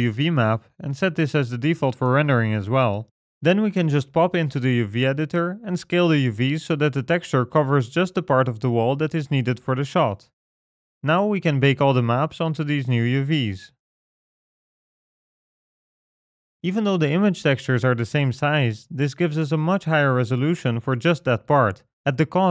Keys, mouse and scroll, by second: 0.1 click, 2.7 click, 3.8-4.6 scroll down 2, 4.6-5.4 scroll down 3, 4.6 a, 5.1 s, 9.3 Tab, 10.9-12.1 scroll up 5, 13.4 click, 13.4 middle click, 13.4 scroll down 4, 13.6 click, 16.9-18.0 scroll down 1, 18.2 click, 20.4 click.